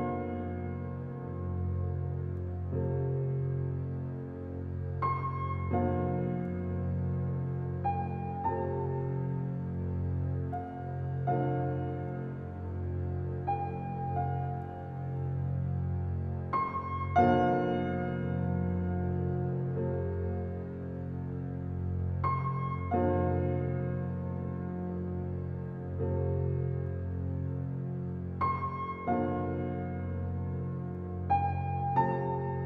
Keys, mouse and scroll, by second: 0.0 click, 0.5-0.8 scroll up 5, 1.2-1.6 shift+middle drag, 1.6-3.2 scroll down 3, 3.2-3.5 scroll up 5, 3.7-4.1 middle drag, 4.2 middle drag, 4.4-5.2 scroll up 9, 4.7 middle click, 5.2 click, 5.4 Tab, 6.2 alt+middle click, 7.1-7.5 scroll up 5, 7.5-9.9 shift+middle drag, 9.9 alt+z, 10.4 click, 11.2 middle click, 12.2 alt+z, 12.8 alt+middle click, 13.3 click, 14.1-15.4 middle drag, 15.4-18.7 drag, 19.2-21.8 drag, 21.8 Tab, 22.3-23.0 middle drag, 23.0 Tab, 23.5 alt+z, 24.3 click, 25.2 shift+click, 25.5-27.1 middle drag, 27.1 shift+click, 27.9 click, 28.3 click, 29.8 click, 30.3 click, 30.6-32.6 middle drag.